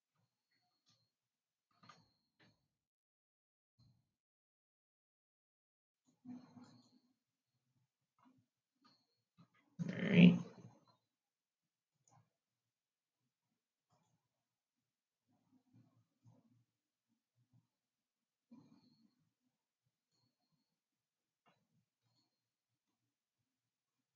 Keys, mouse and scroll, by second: 2.6 ctrl+r, 12.3 click, 14.5 click, 16.5 click, 22.7 click.